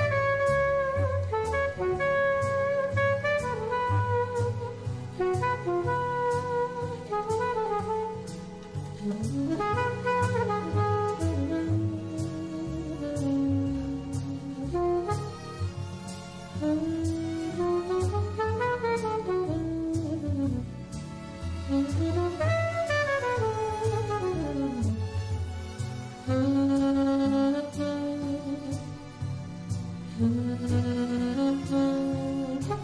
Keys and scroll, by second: 2.0 3, 29.9 alt+super+space.